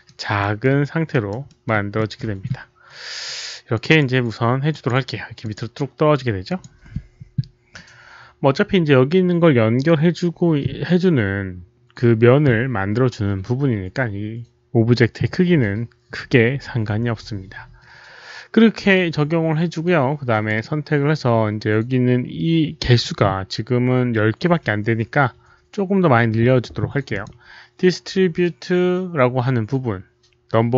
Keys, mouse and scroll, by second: 0.3 alt+middle click, 1.0 alt+right click, 1.4 alt+middle click, 1.9 alt+middle click, 3.7 click, 3.8 click, 4.6 click, 5.3 click, 6.4 click, 10.5 click, 10.5 alt+middle click, 10.5 alt+right click, 12.3 click, 20.4 click, 22.8 click, 27.0 click.